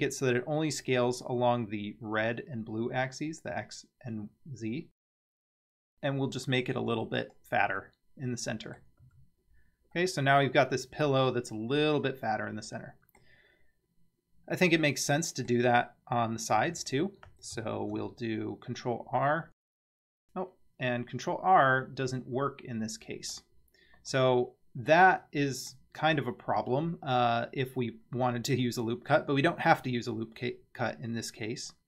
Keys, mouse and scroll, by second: 7.8-8.9 middle drag, 9.0 Tab, 9.5 scroll down 2, 10.0-13.2 middle drag, 13.7 scroll up 2, 14.5 scroll down 1, 14.9-15.5 middle drag, 16.6 Tab, 17.8 ctrl+r, 25.2-25.8 middle drag, 28.7 middle click.